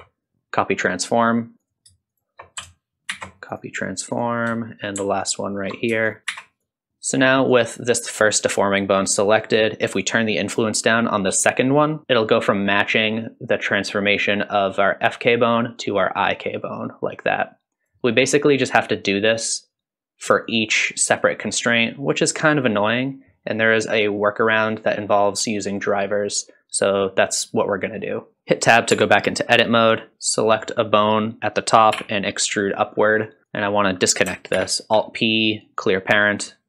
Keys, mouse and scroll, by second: 1.6 click, 2.1 shift+click, 3.1 ctrl+shift+c, 4.1 click, 5.2 ctrl+shift+click, 6.1 shift+click, 6.3 ctrl+shift+c, 6.9 click, 7.5 click, 10.3-12.0 drag, 16.7-17.9 drag, 18.6 click, 19.7-20.5 drag, 21.2 click, 22.3-24.7 drag, 25.7 click, 27.5 click, 28.3 shift+middle click, 28.3-28.9 scroll down 3, 29.0 Tab, 30.3 click, 31.9 e, 33.5 click, 34.6 alt+p.